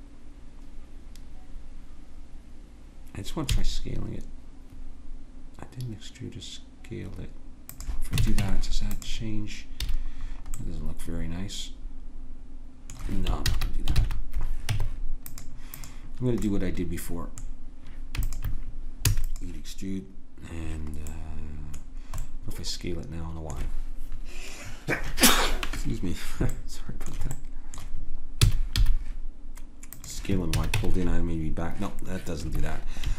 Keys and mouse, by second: 3.5 s, 8.2 a, 8.4 Tab, 9.8 a, 10.2-11.6 middle drag, 13.5 ctrl+z, 13.9 ctrl+z, 14.7 Tab, 15.7-18.3 drag, 19.0 e, 28.4 s, 30.6 a, 30.7 Tab.